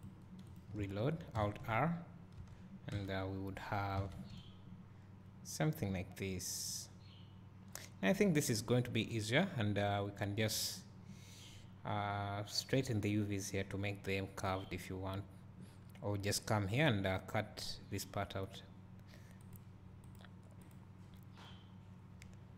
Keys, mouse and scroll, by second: 0.0-0.5 drag.